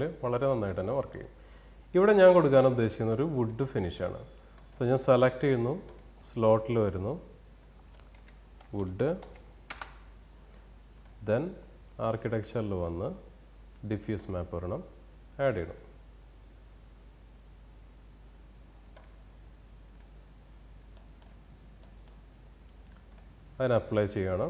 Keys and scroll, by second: 8.8 Return.